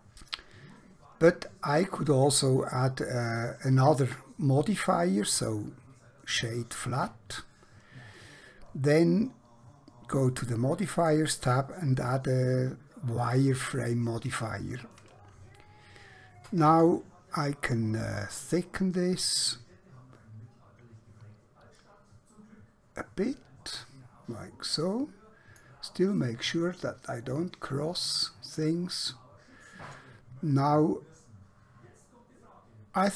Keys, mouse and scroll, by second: 4.9 right click, 6.5 click, 10.3 click, 15.7 shift+middle click, 18.3 click, 26.3 middle click.